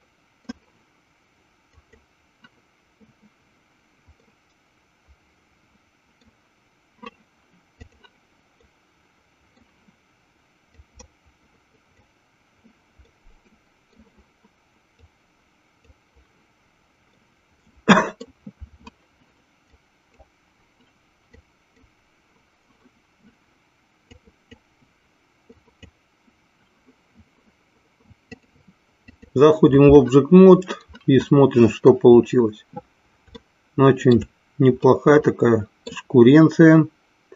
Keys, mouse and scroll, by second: 4.3-6.3 middle drag, 7.8 click, 8.7 middle click, 11.0-12.3 drag, 13.1 middle click, 15.1 click, 17.2-18.3 middle drag, 19.8 click, 21.5 click, 24.2 click, 25.7 click, 28.2-30.0 drag, 30.8-32.1 middle drag, 33.6 shift+middle click, 35.2 middle click.